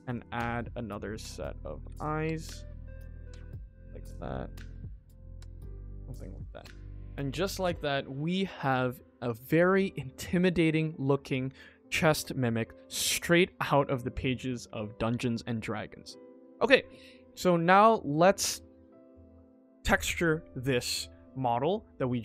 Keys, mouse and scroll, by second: 2.6 middle click, 3.3 middle click, 3.8 g, 5.5 middle drag, 5.8 click, 6.1 middle click, 6.4 scroll down 1, 6.6 middle click, 7.0 middle click, 7.2 shift+middle click, 7.7 ctrl+s, 7.7 ctrl+z, 9.8 click, 10.1 middle click, 10.6 middle drag, 11.9 middle click, 13.0 scroll up 2, 13.2 middle click, 15.4 scroll up 1, 15.5-16.2 middle drag, 16.3-17.0 scroll down 3, 16.9-17.3 middle drag, 20.6 middle click, 21.5 middle drag, 22.1 ctrl+s.